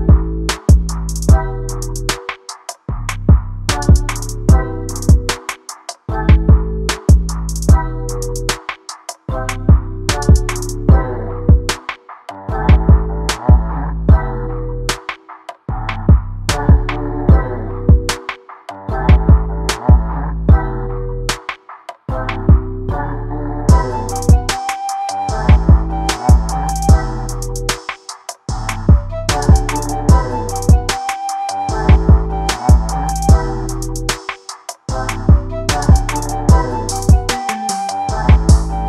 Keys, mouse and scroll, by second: 0.1 click, 0.3 click, 1.0 ctrl+z, 1.3 alt+a, 1.4 scroll down 1, 1.5 shift+middle click, 1.8 click, 2.5 click, 3.7 alt+a, 3.8 scroll down 2, 3.9-4.5 scroll up 3, 4.5 click, 4.8 click, 5.3 ctrl+z, 5.6 click, 6.1 click, 6.7 click, 7.4 click, 8.3 click, 9.1 alt+a, 9.2 scroll down 2, 9.4 middle click, 9.9 shift+Right, 10.0 scroll down 1, 10.1-11.7 middle drag, 11.7 scroll up 1, 11.9-12.5 scroll down 1, 13.5 scroll down 3, 13.6 shift+middle click, 13.7 scroll up 1, 13.8 middle click, 14.2 scroll down 1, 14.4 shift+middle click, 14.5 scroll up 1, 14.6-15.2 middle drag, 15.2 click, 15.9 shift+l, 16.0 middle click, 16.4 alt+d, 17.0 click, 18.4 click, 19.5 r, 22.0 s, 22.7 click, 23.4 click, 24.4 alt+d, 25.6 click, 26.3-26.7 middle drag, 26.7 click, 27.2 r, 30.8 click, 32.5 x, 32.8 scroll down 1, 36.9 click, 37.9 scroll down 1, 38.1 shift+middle click, 38.2 scroll up 1, 38.3 middle click.